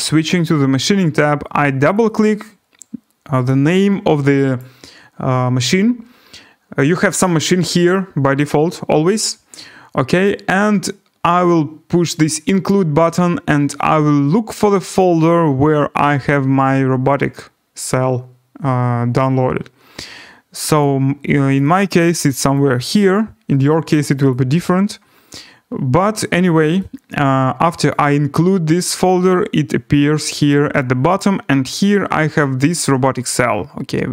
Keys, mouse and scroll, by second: 1.9 click, 2.1 click, 4.6 click, 7.9 click, 10.2 click, 12.6 click, 15.2 click, 20.6 click, 20.8 click, 21.5 click, 21.7 click, 22.4 click, 22.5 click, 23.1 click, 24.3 click, 27.9 click, 31.4 click, 31.9 click.